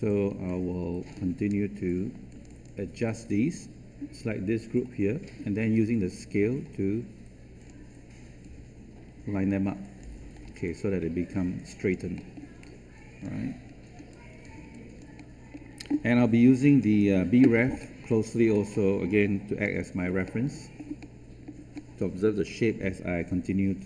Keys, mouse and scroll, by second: 0.4 alt+click, 2.2 shift+click, 6.0-10.2 drag, 10.6 alt+click, 12.1 alt+middle click, 12.5 alt+click, 13.9 alt+scroll down 1, 14.7 alt+click, 15.1 alt+middle click, 16.6 click, 17.5 scroll down 1, 18.4 scroll up 1, 20.2-21.7 middle drag.